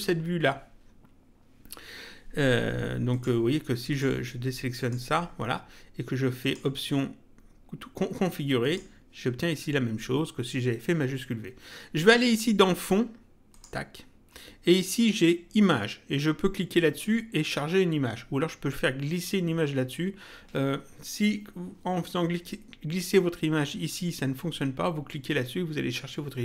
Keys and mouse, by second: 3.1 click, 6.4 click, 8.6 click, 13.5 click.